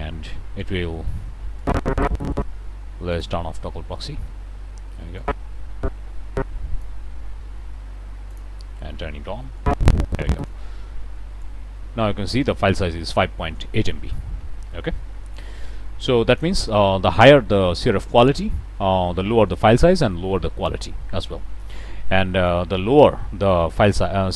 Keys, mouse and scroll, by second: 1.5 click, 3.1 click, 5.1-7.0 drag, 8.2 click, 9.5-10.6 drag, 11.4 click, 15.6 click, 22.4-24.3 drag.